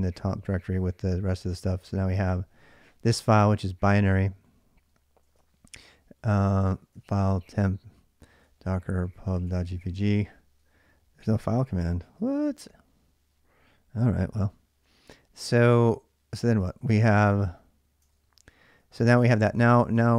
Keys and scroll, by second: 0.4 Return, 5.1 ctrl+[, 5.2-9.7 typing, 16.4 ctrl+a, 16.6 ctrl+a, 17.9 ctrl+[, 17.9-20.1 typing, 19.3 ctrl+a, 19.8 ctrl+a.